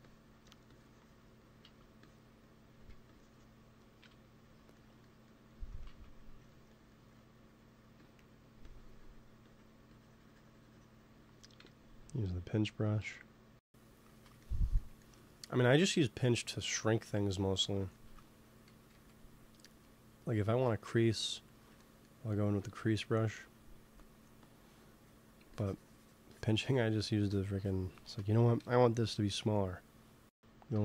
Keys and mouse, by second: 0.3 f, 1.3-3.6 drag, 1.6 ctrl+z, 2.7 f, 3.9 KP_1, 5.8 ctrl+z, 7.8 f, 8.5-11.5 drag, 11.5 KP_1, 12.7 g, 12.9 f, 13.1-15.5 drag, 14.0 ctrl+z, 15.6 ctrl+s, 18.6 g, 18.8 f, 19.4-21.5 drag, 23.9 click, 24.8 f, 25.0-29.4 drag, 28.5 KP_1, 29.4 middle click.